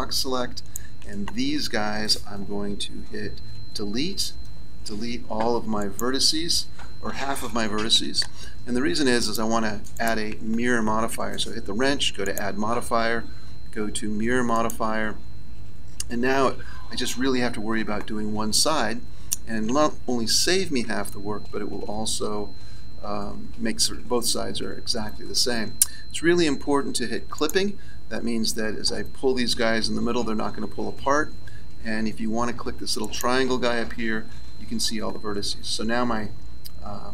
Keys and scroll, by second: 3.5 Delete, 4.8 Delete.